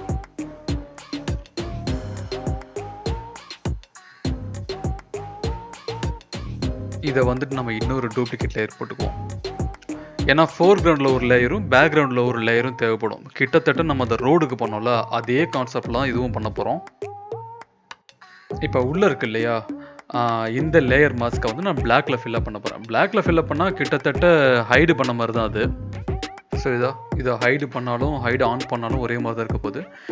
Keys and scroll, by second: 2.9 Return, 23.0 e.